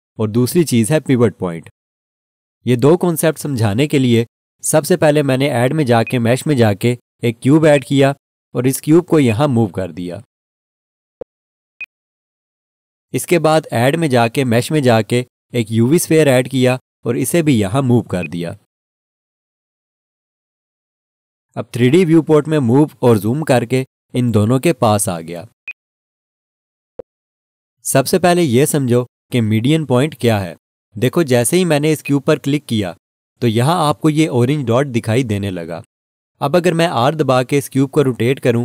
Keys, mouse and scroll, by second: 6.0 click, 11.0 scroll down 1, 11.5 scroll, 11.8 alt+shift+click, 16.5 click, 23.9 scroll up 1, 24.9 scroll, 25.6 alt+shift+click, 26.9-29.8 scroll up 1, 32.0 click.